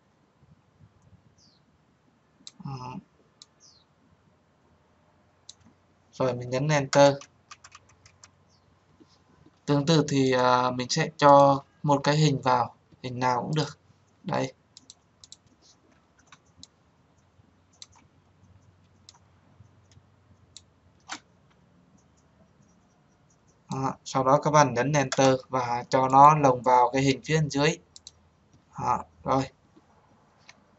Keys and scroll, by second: 6.8 Return, 24.9 Return.